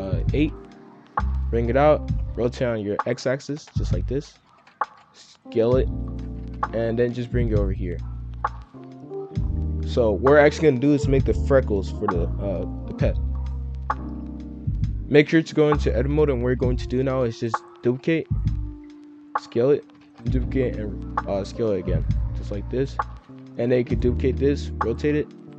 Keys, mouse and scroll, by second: 0.3-1.0 middle drag, 1.0 g, 2.0 r, 4.1-6.9 typing, 6.6 scroll up 1, 8.0 scroll up 5, 8.2 s, 8.9-9.4 middle drag, 9.4 scroll down 2, 11.5 click, 14.8 F2, 15.4-17.0 scroll up 1, 17.2 shift+d, 17.8 g, 20.0 shift+d, 20.3 g, 21.8-25.5 typing.